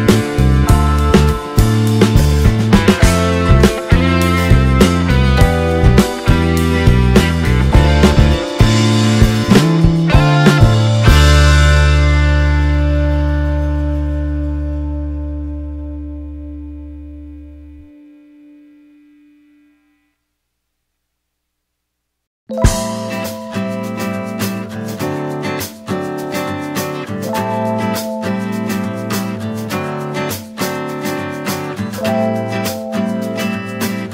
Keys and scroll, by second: 7.8 space, 16.1 d, 16.3 space, 25.1 space, 32.9 space.